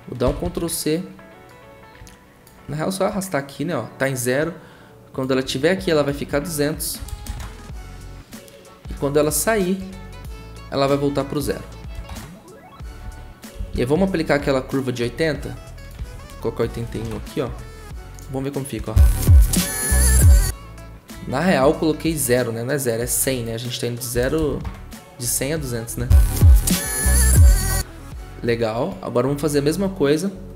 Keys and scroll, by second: 0.2 ctrl+c, 0.4 ctrl+c, 6.7-7.7 typing, 11.7-14.0 typing, 16.0 ctrl+a, 16.5-17.2 typing, 18.8 0, 23.9-24.6 typing, 26.0 0.